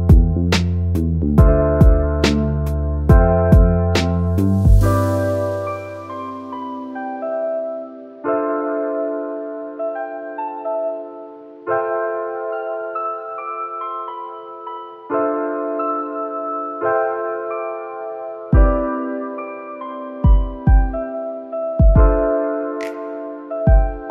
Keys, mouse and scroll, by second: 22.4-22.9 scroll down 2, 22.9 middle click, 23.0-24.1 drag, 24.0-24.1 typing.